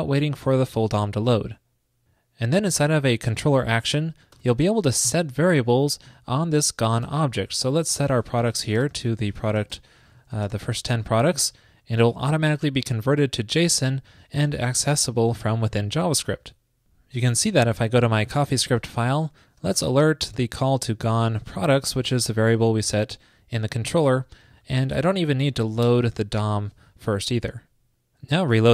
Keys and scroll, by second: 0.7 super+s, 11.7 super+Right, 14.9 super+s, 19.5 shift+super+Right, 24.0 super+Left, 25.1 shift+super+Left, 27.6 super+Return, 27.6 super+s.